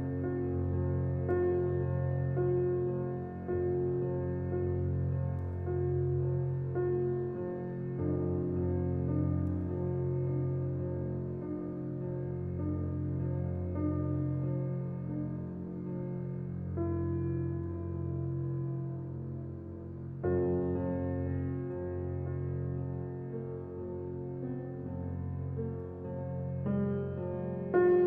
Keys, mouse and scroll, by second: 0.6-3.0 middle drag, 3.0 alt+click, 3.9-6.1 middle drag, 6.1 g, 10.5-13.6 middle drag, 16.0 ctrl+r, 19.7-20.4 scroll up 3, 20.4-21.4 shift+middle drag, 21.4-22.7 scroll up 2, 22.7 ctrl+b.